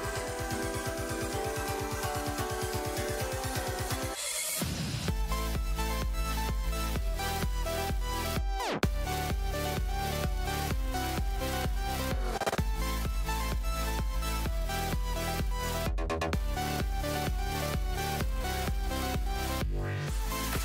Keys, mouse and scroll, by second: 2.7-3.2 drag, 3.7 click, 11.5-12.2 ctrl+scroll up 3, 12.8-13.1 ctrl+scroll down 2, 14.3-15.1 ctrl+scroll down 4, 15.3-15.7 ctrl+scroll up 2, 17.2 click, 18.2 click.